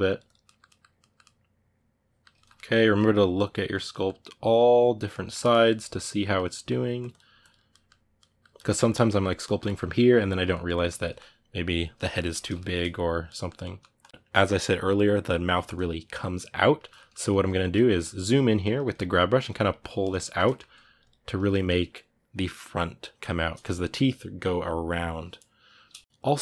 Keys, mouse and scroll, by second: 0.2-6.8 middle drag, 6.8 click, 7.5-13.8 middle drag, 13.8 click, 13.9-19.1 ctrl+shift+middle drag, 19.1 click, 19.8 ctrl+shift+middle click, 20.5-26.4 drag, 25.9 middle click.